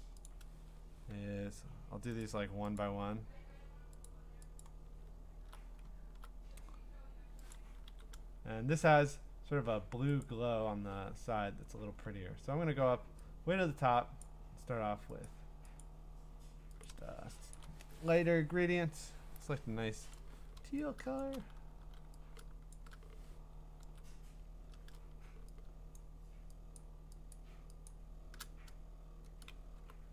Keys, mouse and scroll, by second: 0.3 click, 2.4 click, 2.8 click, 3.0-3.4 scroll, 4.1 click, 4.6 click, 5.2 middle click, 6.4 middle click, 6.5 middle click, 7.5 click, 7.9 g, 10.2 click, 10.9-12.6 scroll, 14.2 click, 15.3 click, 15.8 click, 16.8 click, 17.5 click, 20.1 click, 21.8 g, 22.7 shift+click, 23.8 ctrl+z, 26.0 shift+click, 26.8 shift+click, 27.3 shift+click, 27.9 shift+click.